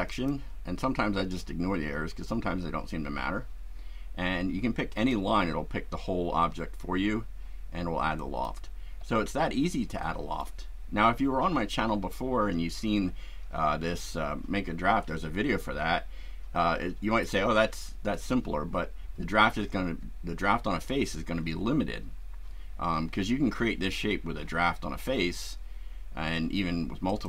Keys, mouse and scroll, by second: 0.1 click, 4.9 click, 8.2 click, 9.1-10.6 shift+right drag, 20.3 scroll down 2, 20.8 scroll up 2, 27.1 click.